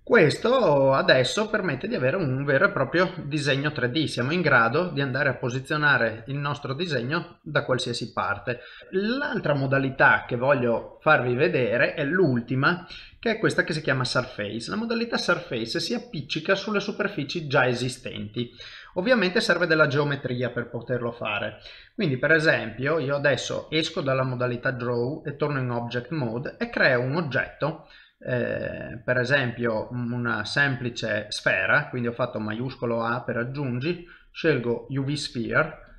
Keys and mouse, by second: 0.4 middle click, 5.7 shift+middle click, 6.1 middle click, 8.6 shift+middle click, 8.8 middle click, 10.8 shift+middle click, 11.4 middle click, 12.4 click, 18.2 middle click, 19.1 shift+middle click, 19.5 middle click, 22.9 middle click, 24.1 ctrl+Tab.